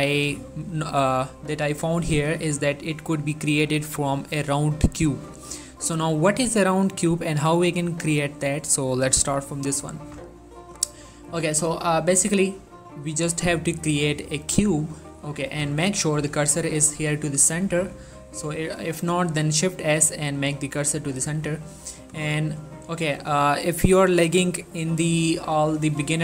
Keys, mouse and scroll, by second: 11.1 shift+Num_Lock, 11.6 shift+a, 14.6 click, 15.7 x, 15.9 click, 16.9 middle click, 18.1 shift+s, 22.4-23.0 scroll down 2, 23.0 middle click, 23.2-24.3 scroll up 2, 24.3-25.2 scroll up 1, 25.4-26.1 middle drag.